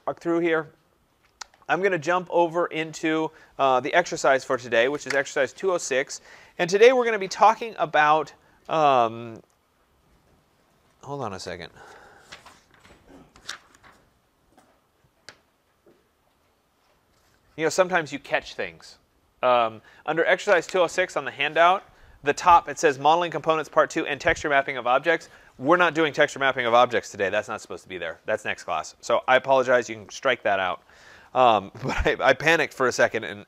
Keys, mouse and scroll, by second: 2.5 click.